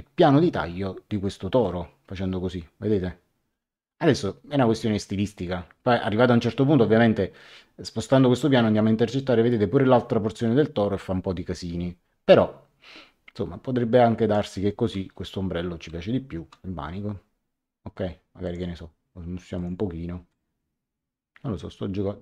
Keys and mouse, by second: 1.6 click, 16.4 Return, 18.4 click, 19.5 click.